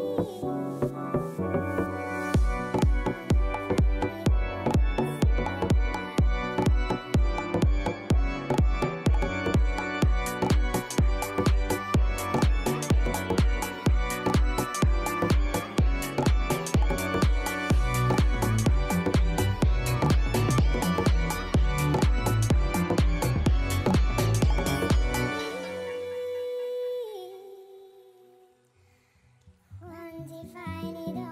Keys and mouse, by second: 0.8 click, 1.7 click, 2.2 right click, 4.7 click, 7.5 right click, 9.2 right click, 9.7 click, 10.5 click, 11.7 click, 12.2 click, 13.3 right click, 14.6 click, 15.6 click, 17.4 click, 18.3 click, 18.8 click, 21.2 click, 22.7 click, 24.2 click, 25.7 click.